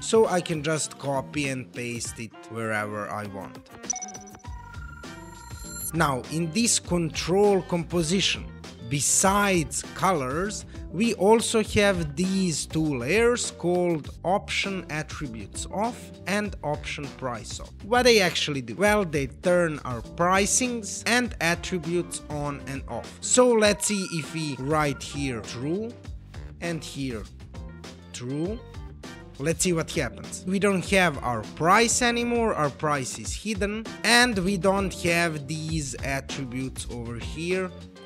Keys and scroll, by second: 1.2 super+c, 24.3-25.4 typing, 27.0-28.2 typing.